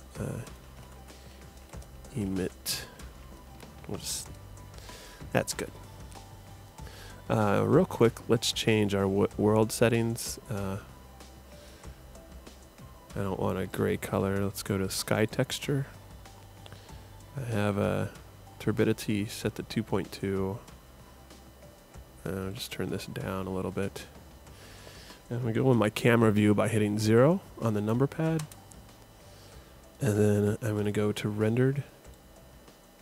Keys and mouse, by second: 1.0 m, 8.0-9.8 drag, 11.3-15.6 drag, 22.5-24.2 drag, 28.4 KP_0.